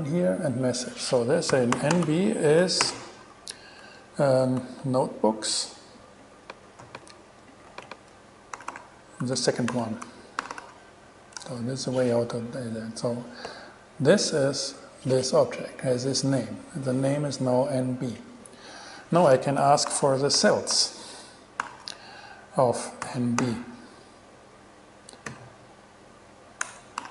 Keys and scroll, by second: 1.5-2.8 typing, 7.0 super+c, 7.9 super+v, 8.8 alt+super+5, 9.9 BackSpace, 10.0 2, 10.6 alt+6, 11.5 alt+shift+6, 11.6 alt+shift+Return, 19.9-21.4 typing, 21.8 alt+5, 23.2 n, 23.6 b, 25.5 ,, 26.8 BackSpace.